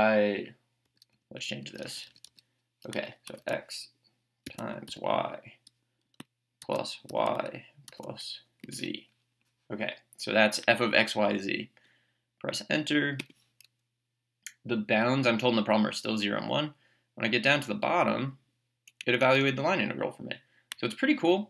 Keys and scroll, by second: 0.9 BackSpace, 3.3 x, 4.4 *, 4.9 y, 7.1 y, 8.6 z, 13.2 Return, 14.8 Down, 19.0 Right.